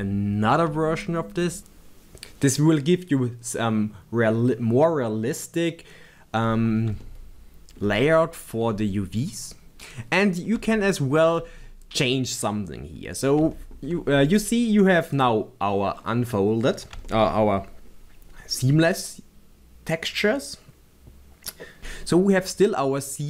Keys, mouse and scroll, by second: 0.0 shift+middle click, 7.0-9.0 shift+middle drag, 10.3 scroll up 1, 10.7 shift+middle click, 11.7-12.1 scroll up 2, 13.1 scroll down 1, 13.5 shift+middle click, 15.1 click, 16.0 scroll down 1, 17.1 shift+middle click.